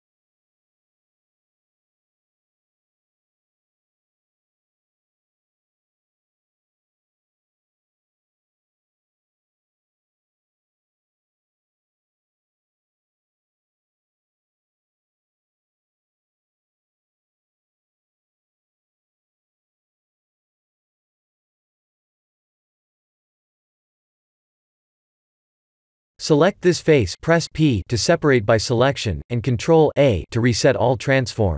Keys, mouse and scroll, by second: 0.7 click, 1.9 click, 4.2 shift+d, 5.2 p, 6.1 Tab, 7.5 shift+z, 8.0 click, 8.5 click, 13.6 KP_7, 15.8 ctrl+a, 19.0 s, 22.3 KP_1, 23.1-24.3 scroll up 3, 24.3 middle click, 24.4 middle click, 25.7 middle click, 26.0 Tab, 26.4 a, 27.2 e, 29.0 ctrl+z.